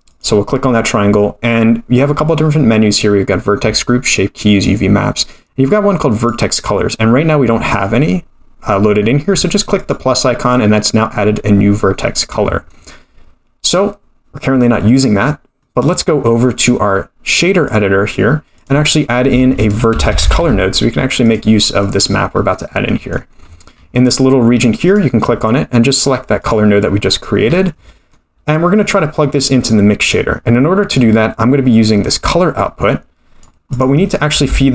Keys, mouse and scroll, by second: 0.1 click, 6.2 click, 7.0-9.3 scroll down 2, 9.8 click, 14.9-16.0 scroll up 8, 15.6 middle click, 16.2 middle click, 16.6-17.0 scroll up 1, 17.6 click, 18.6 click, 19.4 shift+a, 22.3-22.9 scroll up 5, 22.9 middle click, 23.4 scroll down 1, 23.4-24.8 scroll up 5, 24.8-26.5 drag, 24.8-25.6 scroll up 1, 27.4-28.1 scroll down 10, 28.1 middle click, 31.1-32.2 scroll up 3, 32.2-33.4 drag, 32.2-33.1 scroll up 1, 33.7 click, 34.1 middle click, 34.5 shift+a.